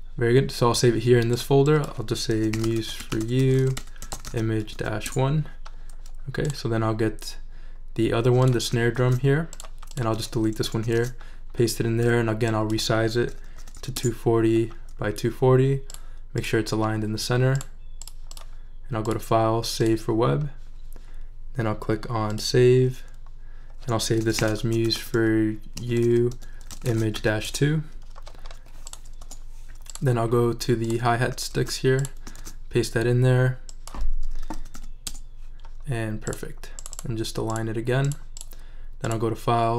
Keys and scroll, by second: 2.1-5.2 typing, 9.0 super+c, 10.6 BackSpace, 10.9 super+v, 13.0-14.3 typing, 24.0-27.6 typing, 29.2 BackSpace, 31.5 super+c, 32.4 super+v, 34.2-35.2 typing.